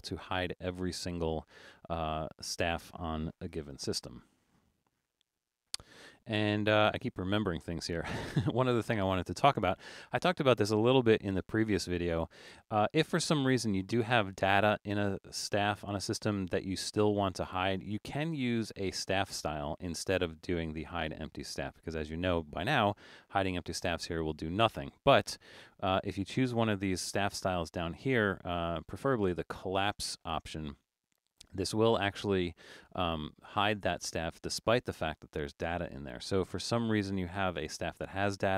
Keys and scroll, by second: 0.0 super+=, 0.5 super+=, 3.7 super+z.